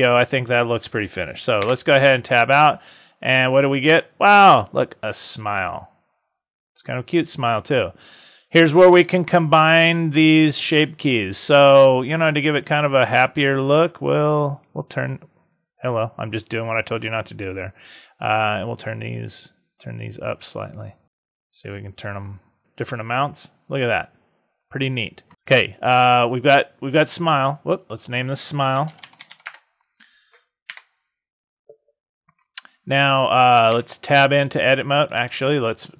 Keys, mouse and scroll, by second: 1.6 Tab, 3.3 click, 12.5 click, 14.6 click, 15.8 click, 17.8 click, 20.6 click, 22.5 click, 27.7 click, 30.6 Tab, 33.6 Tab, 35.1 Tab.